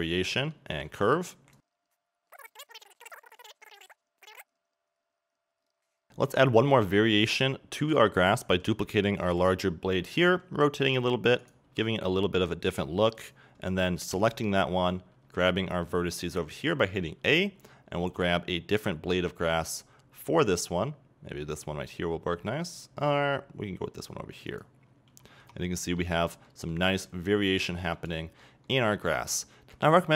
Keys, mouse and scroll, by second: 0.2 middle click, 1.6 z, 2.4 middle click, 2.8 right click, 3.1 scroll down 1, 3.2 middle click, 3.9 middle click, 4.4 z, 4.8 middle click, 5.2 middle click, 5.4 click, 5.6 Tab, 5.7 scroll down 2, 5.9 middle click, 6.0 scroll up 1, 11.4 right click, 13.3 click, 24.6 click, 25.4 a, 25.5 Tab, 25.7-29.0 middle drag, 26.3 scroll up 2, 29.4 scroll down 2, 29.4-30.1 middle drag.